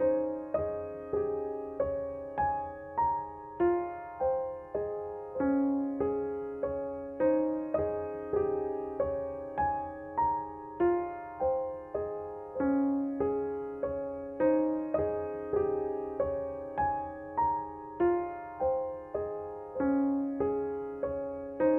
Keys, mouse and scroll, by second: 1.0 click, 7.6-11.1 drag, 11.1 space, 11.3 click, 11.6 space, 14.0 click.